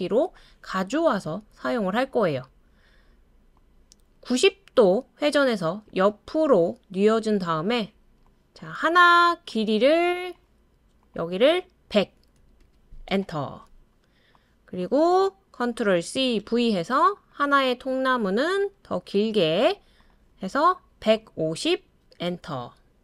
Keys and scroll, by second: 11.9-12.6 typing, 13.1 Return, 16.0 super+c, 16.4 super+v, 21.6-23.0 typing.